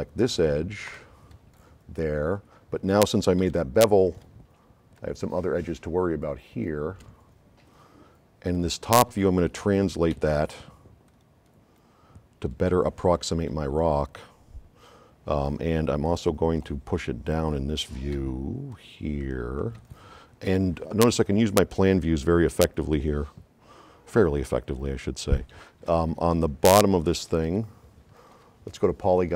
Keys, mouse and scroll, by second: 1.0 F9, 2.3 middle click, 2.3 scroll up 2, 3.5 s, 3.5-4.3 right drag, 5.0 shift+click, 6.3 shift+click, 8.6-9.4 drag, 10.2 v, 11.1 click, 13.6 click, 15.4-15.9 drag, 16.1-16.7 drag, 18.3 v, 18.7-19.9 drag, 27.3 s, 27.5 right click.